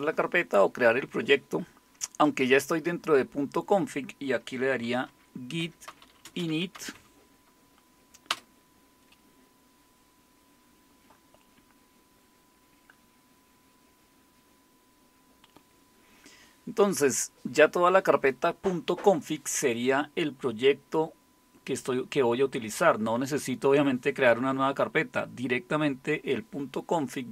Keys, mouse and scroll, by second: 4.6-7.4 typing, 8.3 Return.